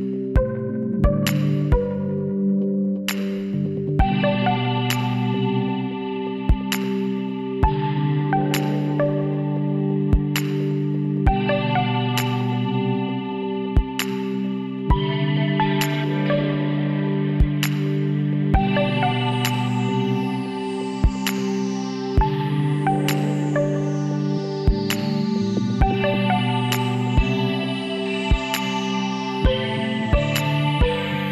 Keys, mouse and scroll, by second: 1.6 KP_1, 3.0 e, 5.2 middle click, 6.1 KP_2, 7.5 KP_3, 8.6-10.3 drag, 12.3-14.1 middle drag, 18.5-20.3 middle drag, 20.3 ctrl+r, 23.6 click, 24.1-25.4 middle drag, 25.4 click, 25.6-26.7 middle drag, 26.1 e, 28.9 middle click, 29.6-30.7 drag, 30.7 middle click, 30.7 l.